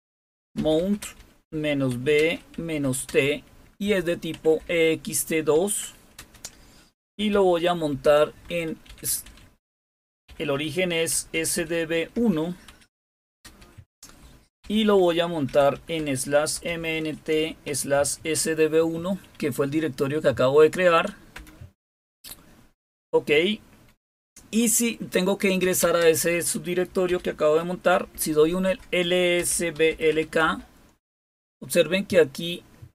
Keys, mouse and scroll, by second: 0.0-6.1 typing, 8.0-13.3 typing, 14.6-18.3 typing, 21.3 Return, 25.3-30.5 typing.